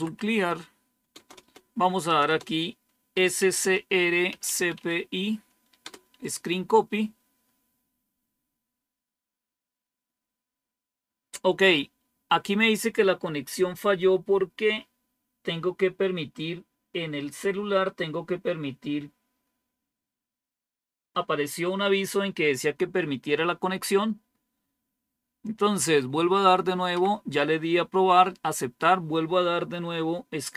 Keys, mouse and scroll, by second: 0.0-0.4 typing, 1.0 Return, 1.3 Return, 2.0 Return, 2.1 Return, 2.8-4.9 typing.